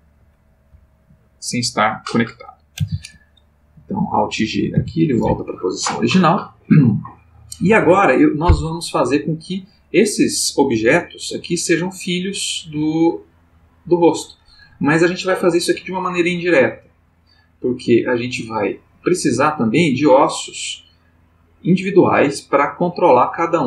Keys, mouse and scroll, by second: 2.7 alt+r, 3.8 click, 4.7 alt+g, 12.9-14.1 shift+middle drag.